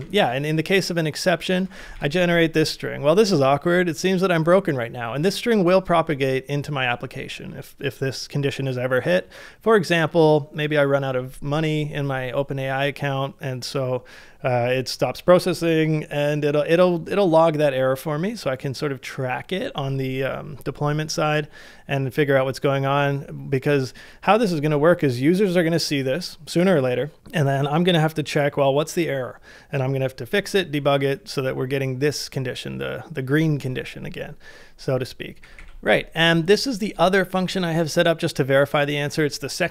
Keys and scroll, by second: 1.5 ctrl+c, 1.5-2.4 typing, 35.4 shift+z.